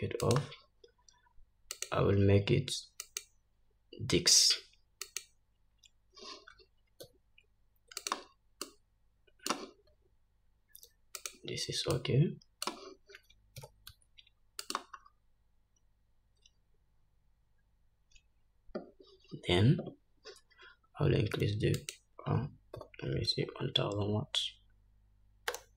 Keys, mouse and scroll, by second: 2.2 click, 3.5-8.6 drag, 7.5 s, 9.2-11.8 drag, 10.4 s, 12.4-15.3 drag, 14.1 g, 15.6 scroll up 2, 16.4-17.5 scroll up 1, 17.5-18.0 scroll down 1, 22.3-25.7 drag, 24.0 0.